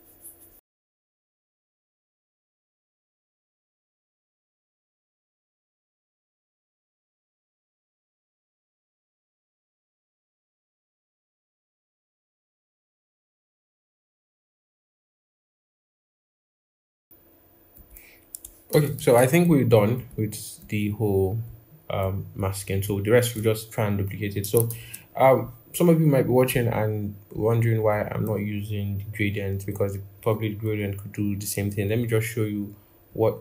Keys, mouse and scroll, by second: 2.7 ctrl+z, 2.9 ctrl+z, 3.1 i, 3.5 scroll down 1, 3.5 i, 8.5 ctrl+-, 9.1 double click, 9.8 i, 11.0 ctrl+=, 12.1 ctrl+a, 18.5 ctrl+-, 18.6 ctrl+-, 24.5 ctrl+=, 24.6 ctrl+=, 25.3 scroll, 28.1-28.7 scroll down 1, 30.4 double click, 31.4 double click.